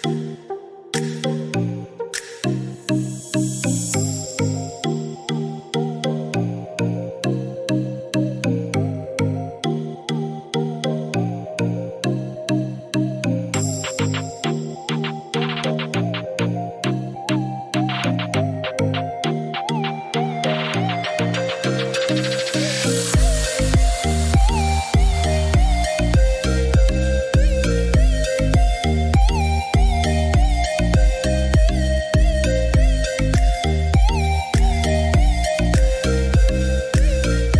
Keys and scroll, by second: 7.4 8, 7.8 0, 8.1 Return.